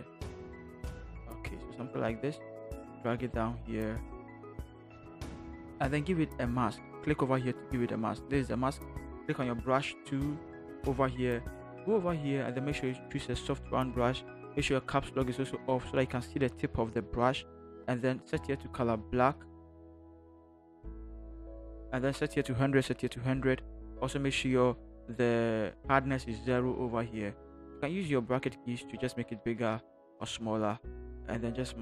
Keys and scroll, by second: 4.9 Return, 9.5 b, 15.6 Caps_Lock, 27.9-30.3 typing.